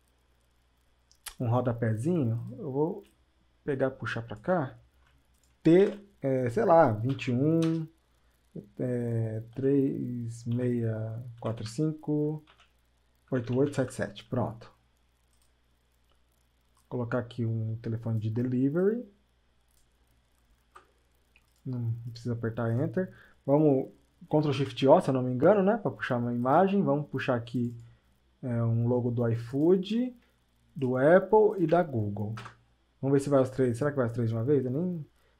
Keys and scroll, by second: 13.7 KP_7, 20.7 Return.